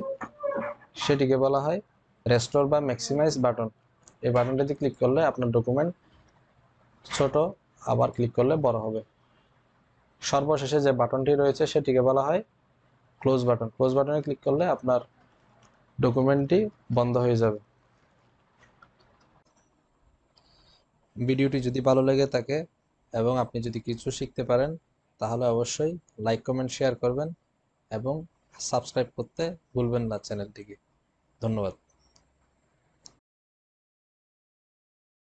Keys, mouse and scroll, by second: 4.6 click, 7.9 click.